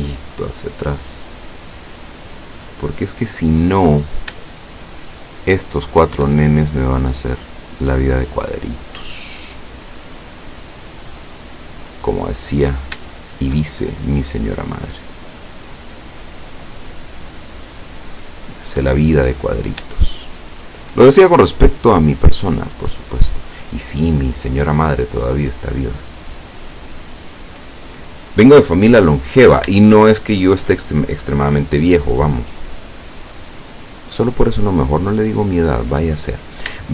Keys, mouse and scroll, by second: 2.6-3.2 scroll up 2, 4.0 right click, 4.7 shift+right click, 5.3 shift+right click, 5.8 shift+right click, 6.4-12.1 shift+drag, 12.7 right click, 13.2 shift+right click, 13.7-15.6 shift+drag, 15.6-16.0 scroll down 1, 16.1 middle click, 17.2-17.6 scroll down 1, 18.5-18.8 scroll up 1, 19.6 shift+right click, 20.1 shift+right click, 20.6 shift+right click, 21.8-25.2 drag, 25.2-25.7 scroll down 1, 26.2-26.6 scroll up 1, 26.7-27.0 scroll down 1, 29.3-29.7 scroll down 1, 29.9 shift+middle click, 31.5-35.3 middle drag, 35.6-36.1 scroll up 1, 36.1 scroll up 1, 36.2 scroll down 1.